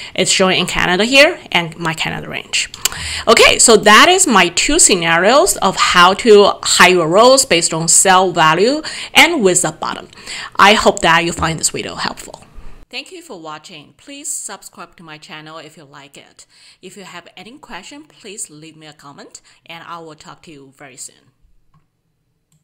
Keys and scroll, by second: 3.0 alt+Tab.